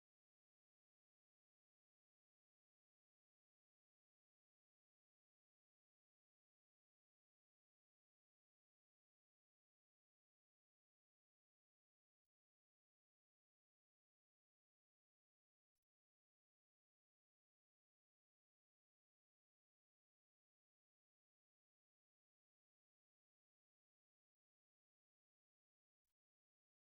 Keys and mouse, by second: 2.3 middle click, 3.6 g, 4.6 middle click, 5.4 ctrl+Tab, 6.5 ctrl+Tab, 8.7 2, 9.4 right click, 9.9 Tab, 10.5 middle click, 11.9 right click, 13.7 alt+right click, 15.2 shift+right click, 18.8 o, 21.8 click, 22.8 click, 25.5 middle click.